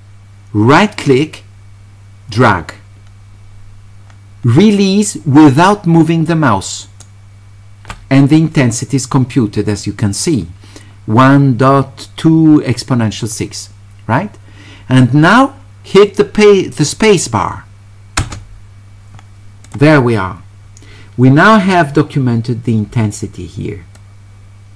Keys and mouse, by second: 0.8-7.0 right drag, 18.2 space, 19.6 click, 24.0-24.7 drag.